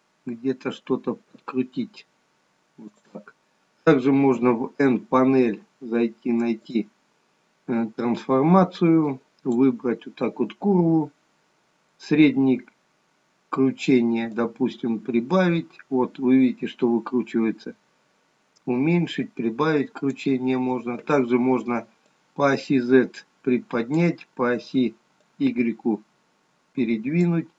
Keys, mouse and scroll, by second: 4.4 n, 6.8 click, 9.2 click, 14.5 click, 22.3 click, 25.5 click.